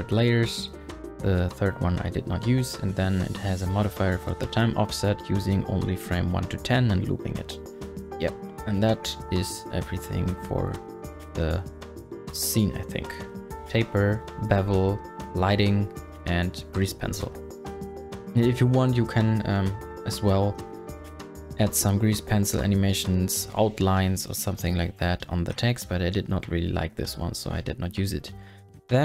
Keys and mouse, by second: 1.9 click, 10.2 click, 11.0 click, 19.4 click, 20.4 space, 25.8 space, 26.9 click.